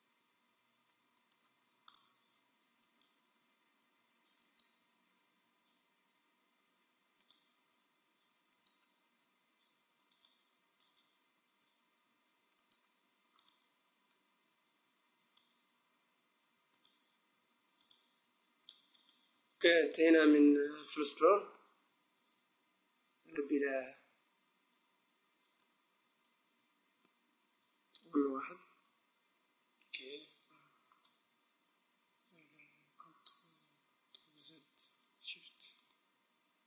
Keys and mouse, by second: 0.0 e, 1.9 click, 2.8 middle click, 3.7 right click, 3.8 e, 7.3-8.9 drag, 7.6 e, 10.2-11.6 drag, 10.8 right click, 11.6 e, 13.4-15.1 drag, 15.1-16.7 right drag, 16.5 a, 16.8-18.4 drag, 18.7 middle click, 27.6 middle click, 28.3 KP_1, 30.4-31.5 drag, 30.8-32.6 right drag, 34.4 ctrl+z, 35.6-36.6 right drag.